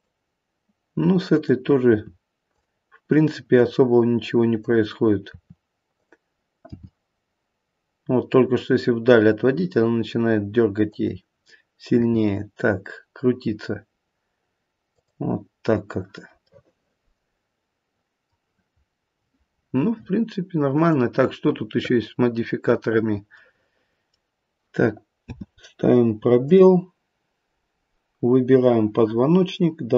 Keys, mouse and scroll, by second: 1.3 click, 1.9 r, 3.5 click, 4.6 click, 5.2 r, 6.6 g, 12.0 r, 16.5 middle click, 17.1 middle click, 17.3 middle click, 18.7 scroll up 1, 20.7 click, 23.3 middle click, 25.2 space, 26.3 click.